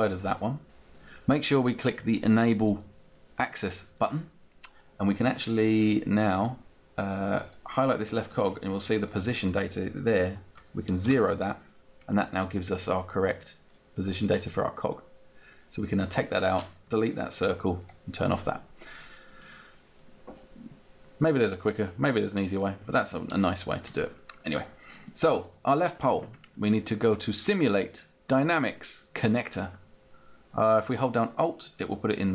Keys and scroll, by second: 10.6 0, 10.9 Return, 16.9 Delete.